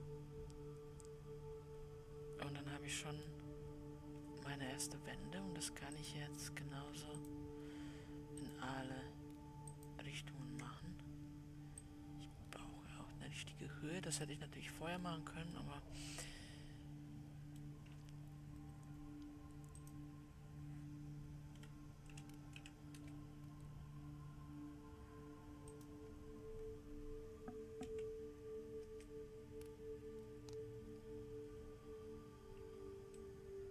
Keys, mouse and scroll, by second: 0.5-6.1 middle drag, 6.1-7.7 drag, 8.8 shift+click, 9.9-15.3 shift+drag, 16.2-20.2 middle drag, 20.2-33.5 drag, 33.5 middle click.